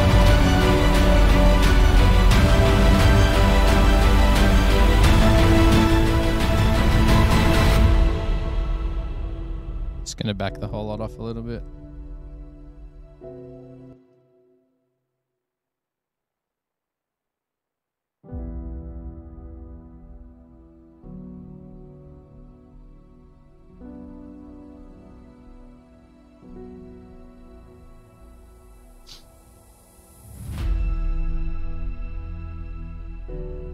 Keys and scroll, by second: 14.2 space, 14.3 space, 16.7 super+=, 18.0 super+=.